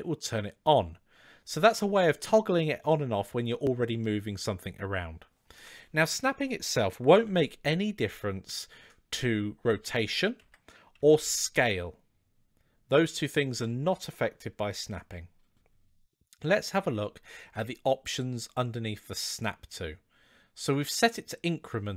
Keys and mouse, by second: 6.9 r, 10.8 s, 17.7-21.9 drag.